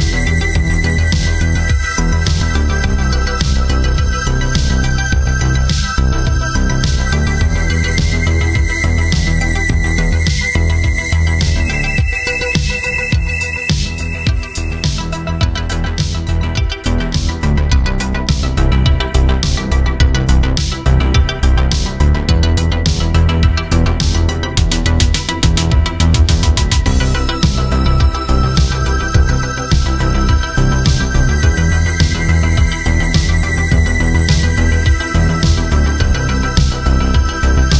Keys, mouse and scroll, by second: 3.3 w, 6.1 y, 9.2 space, 16.7 Return, 17.1-19.8 typing, 18.8 Return, 19.9 Tab, 24.1 ctrl+alt+click, 28.1 ctrl+alt+click, 31.1 alt+shift+click.